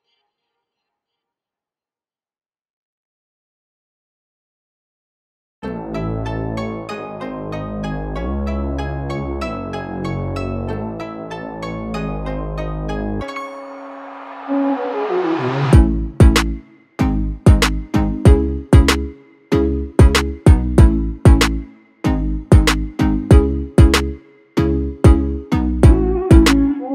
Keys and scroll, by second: 4.2-6.1 typing, 22.7 1, 24.4-25.5 typing, 26.7-26.9 typing.